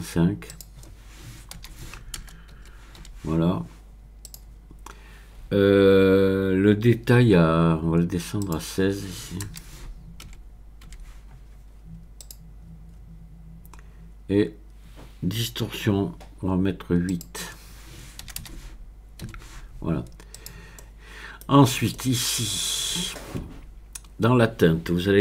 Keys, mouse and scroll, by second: 0.5 click, 1.6 BackSpace, 2.3 KP_0, 2.6 KP_Decimal, 3.0 KP_5, 4.2-7.3 drag, 8.4 click, 9.5 BackSpace, 10.3 KP_1, 10.9 KP_6, 12.2 click, 17.1 click, 18.3 BackSpace, 18.4 BackSpace, 19.3 KP_8, 20.8 middle click, 21.5-21.9 scroll down 2, 21.9-22.9 middle drag.